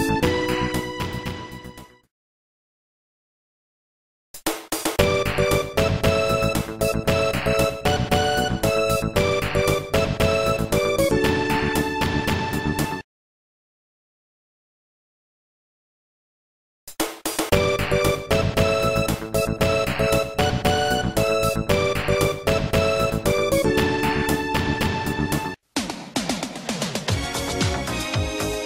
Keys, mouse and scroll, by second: 0.3 click, 1.2 0, 2.1 Tab, 2.6 click, 4.3 a, 7.3-7.8 scroll up 2, 9.0 scroll up 1, 9.5 scroll up 1, 15.3 scroll up 1, 17.8 scroll down 2, 18.8 scroll down 2, 19.3 middle click, 20.5 click, 21.9-22.3 scroll down 2, 22.3 c, 23.0 scroll down 1, 23.9 click, 25.2 right click, 26.3 c, 26.6 click.